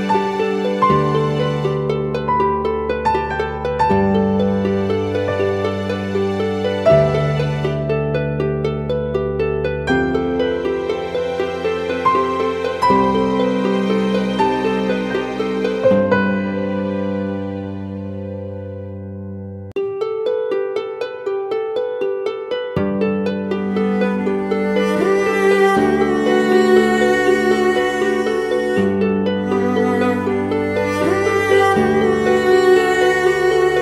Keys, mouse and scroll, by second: 2.8 typing, 8.5 double click, 22.0 ctrl+t, 23.1 alt+shift+click, 24.7 Return, 28.6 ctrl+t, 32.6 ctrl+t, 33.0 alt+shift+click.